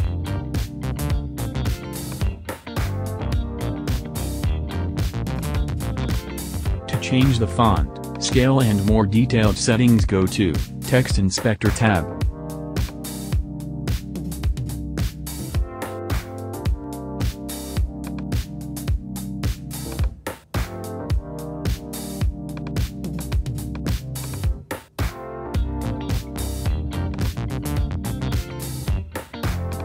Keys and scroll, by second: 2.4 super+z.